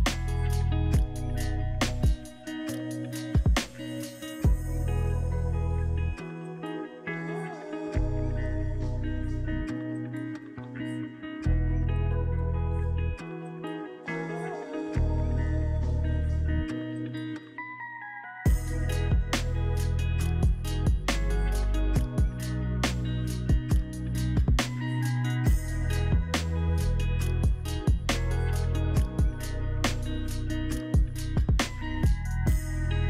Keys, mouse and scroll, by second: 1.6-2.4 typing, 4.1 Return, 7.1-7.5 scroll up 2, 8.1 shift+g, 8.8 middle click, 9.3 shift+g, 10.1 alt+middle click, 12.7-14.2 alt+drag, 14.2 &, 14.8-16.3 drag, 19.3 Delete, 19.8 shift+g.